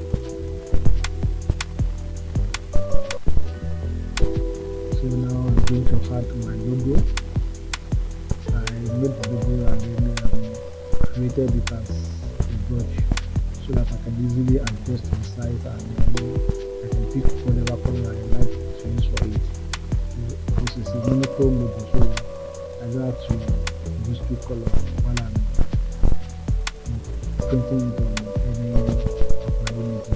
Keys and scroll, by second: 28.4 Return.